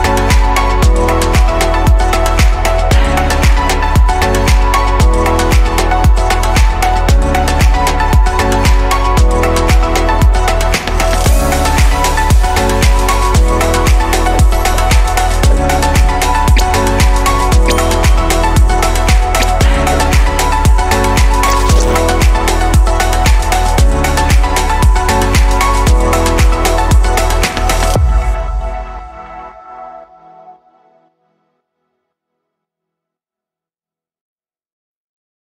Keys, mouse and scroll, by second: 9.3 click, 9.6-12.6 middle drag, 18.3 click, 21.1 click, 22.0-26.6 middle drag, 26.6 click, 28.8-30.1 middle drag, 30.1 shift+click, 31.5 f, 35.3 click.